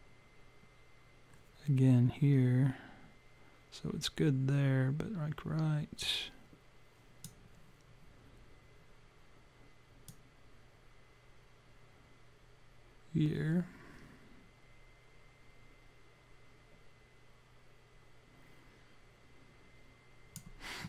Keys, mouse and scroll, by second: 10.1 click.